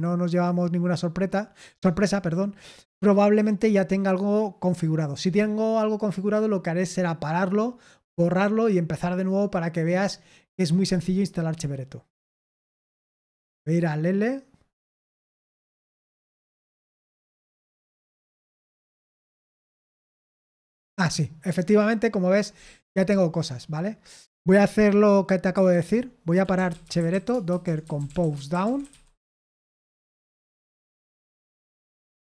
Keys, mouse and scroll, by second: 13.4 super+7, 18.6 ctrl+c, 19.7 super+8, 25.5 super+7, 26.1-29.9 typing, 29.4 Return, 31.5 Return, 31.8-32.2 typing.